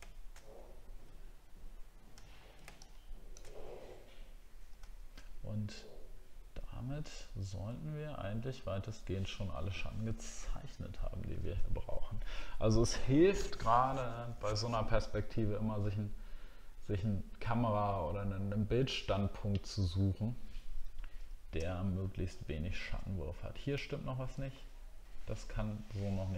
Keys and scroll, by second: 2.2 alt+scroll down 1, 4.9 alt+scroll down 1, 21.6 alt+scroll up 1, 22.2-23.9 alt+scroll up 2.